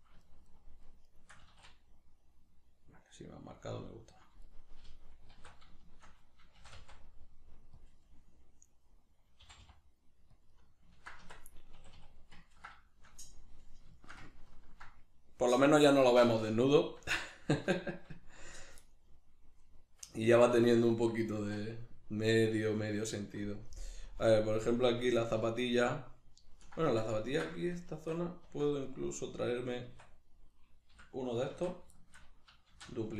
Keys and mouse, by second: 0.2 shift+right click, 0.5 shift+right click, 0.9 shift+right click, 1.1 shift+right click, 1.4 s, 3.7 click, 4.5 right click, 4.8 l, 5.3 alt+q, 5.8-7.9 shift+middle drag, 6.5 shift+d, 7.9 click, 8.0-10.5 middle drag, 9.4 g, 10.5 click, 10.5-19.1 middle drag, 11.2 Tab, 11.7 a, 19.1 right click, 19.1-22.3 middle drag, 21.4 Tab, 22.3 right click, 24.1 KP_Decimal, 24.5-28.9 middle drag, 26.9 Tab, 27.9 Tab, 28.9 right click, 29.9 Tab, 30.5 right click, 30.9 l, 31.5 alt+q, 32.0-33.1 shift+middle drag, 32.7 shift+d.